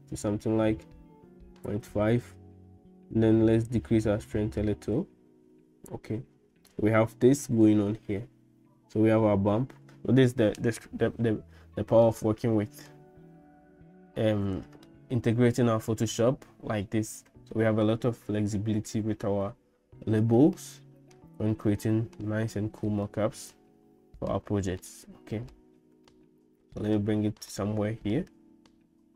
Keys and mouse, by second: 3.7-6.1 shift+drag, 12.1 middle click, 20.6 middle click, 21.7 shift+middle click, 23.0-24.3 middle drag, 24.9 shift+middle click, 26.1 shift+middle click, 27.7 middle click.